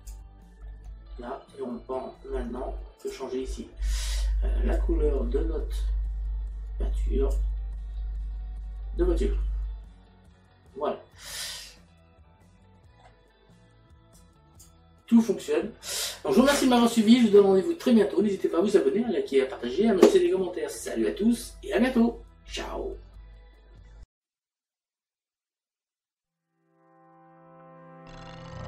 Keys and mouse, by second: 0.7 middle click, 3.0 click, 4.7 click, 11.3 middle click, 14.1 click, 24.0 click.